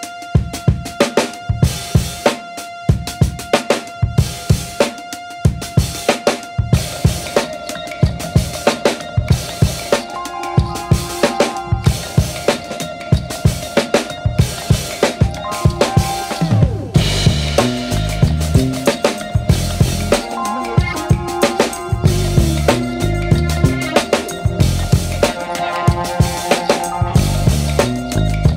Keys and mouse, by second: 1.0 right click, 1.2 g, 3.1 right click, 3.2 g, 4.5 right click, 4.6 g, 5.7 g, 6.6 g, 7.7 g, 8.8 right click, 8.9 g, 10.0 right click, 11.3 g, 12.7 right click, 12.9 g, 15.5 g, 16.5 right click, 17.3 g, 20.5 shift+right click, 21.0 alt+z, 21.4 KP_1, 22.0 shift+middle click, 22.7 e, 23.5 KP_3, 24.4 s, 26.2 shift+middle click, 28.2 right click.